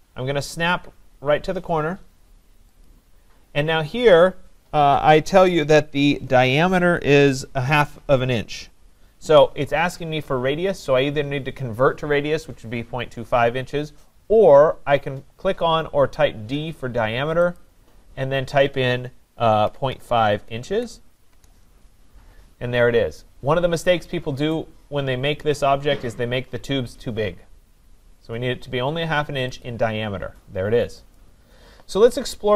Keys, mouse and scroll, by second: 2.8 click, 17.6 click, 19.5-20.6 typing, 21.3 Return, 24.5 right click, 29.7 click, 31.2 click.